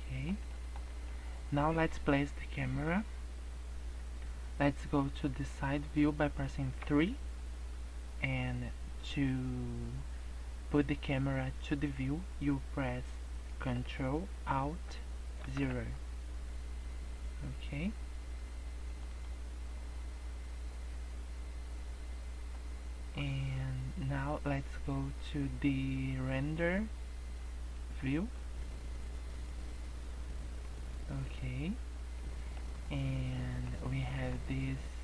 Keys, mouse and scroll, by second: 20.1 scroll up 1, 20.4 scroll down 4, 20.7-21.4 scroll up 7, 21.4-21.7 scroll down 2, 21.7-22.4 scroll up 4, 22.4-23.1 scroll down 2, 28.2 click, 28.8 scroll up 5, 30.1 scroll down 7, 30.4 scroll up 1, 32.1 middle click, 32.7-33.2 scroll down 8, 33.2 middle click, 33.6-34.0 scroll up 4, 34.0 middle click.